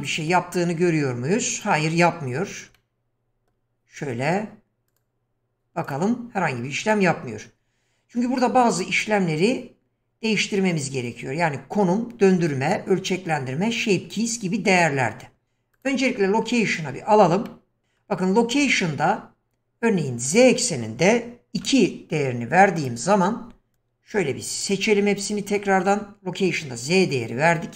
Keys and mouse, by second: 1.5 click, 2.8-3.5 middle drag, 5.8 click, 15.7 click, 16.7 click, 17.4-17.9 middle drag, 18.9 shift+middle click, 20.5-22.9 drag, 24.1 q.